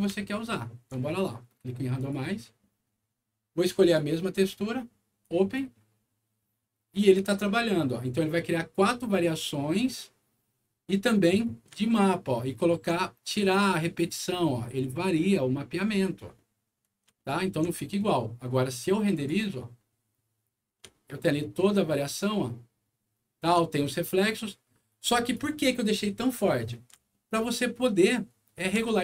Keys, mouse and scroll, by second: 0.1 alt+middle click, 1.9 alt+click, 3.7 alt+click, 5.1 click, 11.3 scroll up 1, 11.8 alt+middle click, 13.1 alt+scroll up 1, 13.9 alt+scroll up 1, 14.5 alt+middle click, 15.7 alt+scroll down 1, 16.3 middle click, 17.1 alt+middle click, 17.7 alt+middle click, 19.0 alt+click, 21.4-23.3 alt+middle drag, 24.8 alt+click, 27.0-28.6 alt+middle drag, 28.9 alt+middle click.